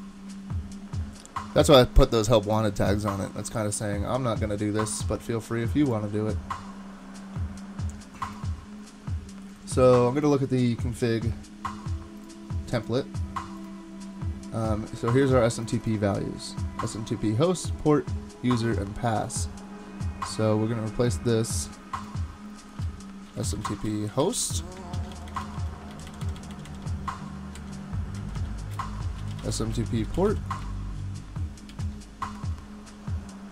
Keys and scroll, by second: 19.4 typing, 22.7-26.1 typing, 24.9 super+Right, 25.9 alt+shift+Left, 28.8-30.8 typing, 31.7 super+s.